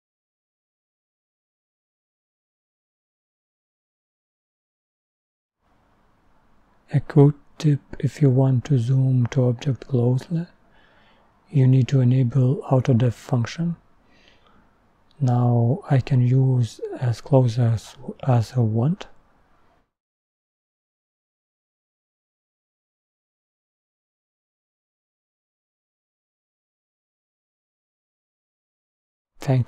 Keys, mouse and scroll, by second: 10.0-13.0 drag, 15.0-16.3 scroll up 7, 17.1-17.8 scroll up 10, 17.8-20.2 middle drag, 20.2-21.4 scroll down 13, 21.4 scroll up 12, 21.6-22.7 scroll down 5, 21.7 middle click, 22.7 click, 23.4 middle click.